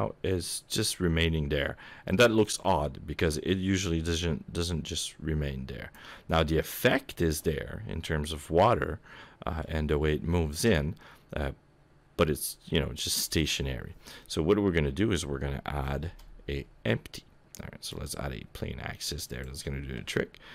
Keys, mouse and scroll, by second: 6.4-7.5 scroll up 2, 7.5 middle click, 14.2 middle click, 15.9 shift+a, 19.3 click, 20.4-20.5 scroll down 16.